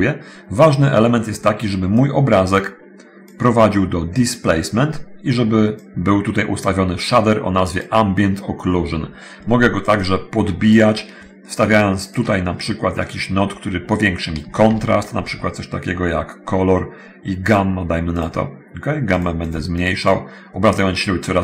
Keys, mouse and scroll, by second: 2.1-3.3 drag, 5.9-8.1 drag, 10.2 click, 12.0 shift+click, 14.7 shift+a, 17.7 click, 18.1 click, 19.3 click, 19.6 click.